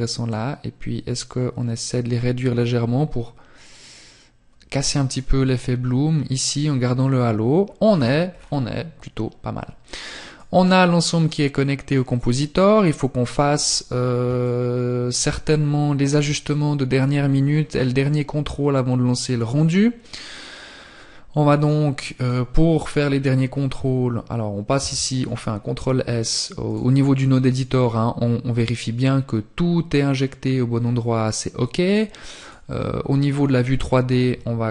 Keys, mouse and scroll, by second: 20.5 click, 24.9 click, 30.8 click, 32.4 t, 33.5 t, 33.8 n, 34.3-34.7 scroll down 3.